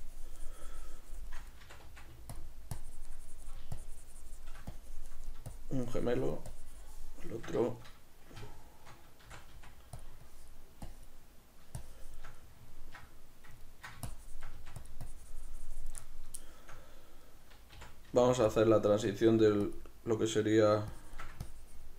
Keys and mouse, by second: 1.7 c, 2.8-7.7 drag, 7.7-10.1 shift+middle drag, 9.3 shift+c, 10.3-12.5 drag, 12.5-14.1 middle drag, 14.1 shift+click, 14.7 f, 15.1 shift+click, 16.1-18.6 middle drag, 17.8 c, 18.6 click, 18.8-19.8 shift+middle drag, 19.4 f, 19.8 click, 21.0-21.9 shift+drag.